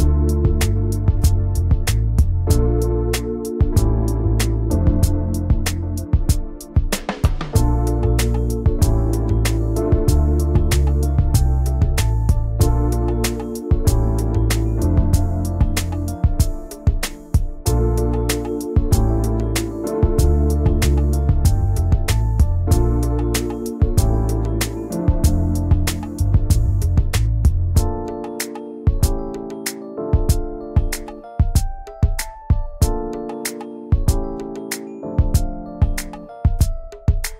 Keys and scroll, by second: 0.2 v, 0.9 ctrl+z, 1.7 BackSpace, 5.0 ctrl+g, 5.9 ctrl+z, 6.3 i, 6.7 v, 19.9-23.3 typing, 32.1 \, 34.5 a, 35.4 v.